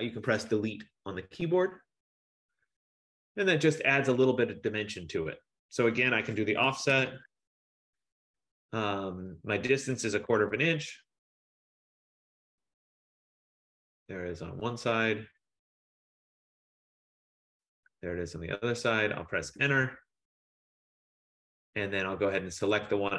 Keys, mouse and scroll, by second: 0.1 Return, 2.1 scroll, 3.2-4.5 scroll, 6.3-8.4 typing, 10.3 Return, 13.2 click, 14.1 click, 16.9 click, 17.9 click, 18.5-18.9 scroll, 19.5 Return, 22.9 click.